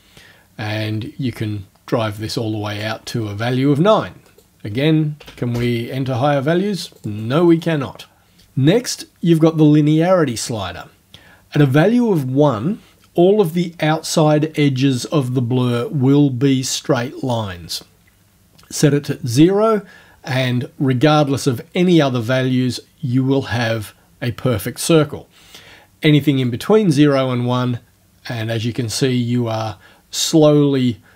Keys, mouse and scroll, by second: 4.3 right click, 5.2 KP_1, 5.3 KP_5, 5.5 KP_Enter, 6.9 right click, 7.5 right click, 18.8 click, 26.5-31.1 drag.